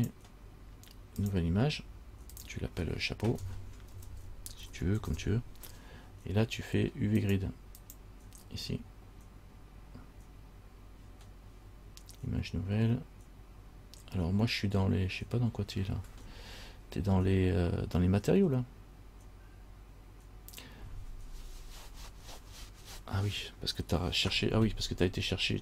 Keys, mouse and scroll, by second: 0.2 click, 1.4 click.